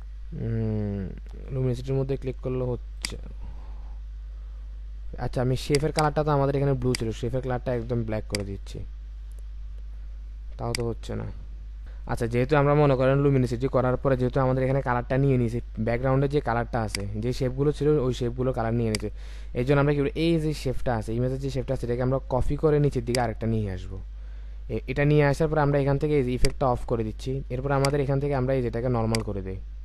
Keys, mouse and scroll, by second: 5.9 double click, 13.4-14.1 alt+scroll up 1, 23.1 alt+click.